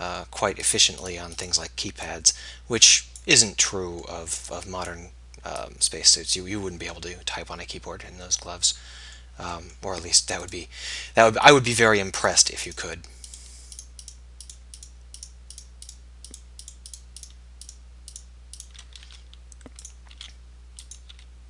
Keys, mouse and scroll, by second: 3.4 click, 7.2 click, 8.2 middle click, 19.0 e, 20.2 s, 21.2 e.